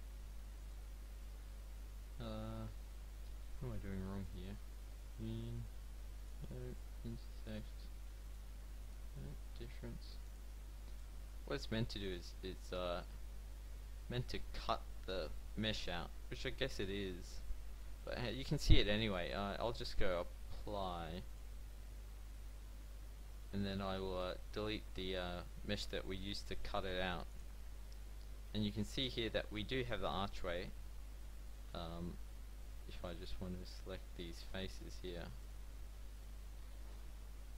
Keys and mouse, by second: 1.6 z, 3.3 click, 24.2 x, 27.0 x, 27.0 z, 29.4 middle click, 30.5-31.5 middle drag, 31.8 Tab, 32.7-34.7 middle drag, 36.2 c.